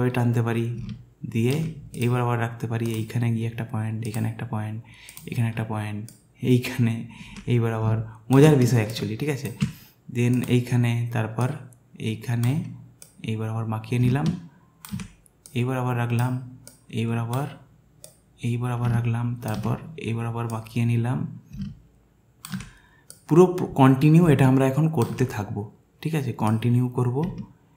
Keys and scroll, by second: 8.7 alt+space.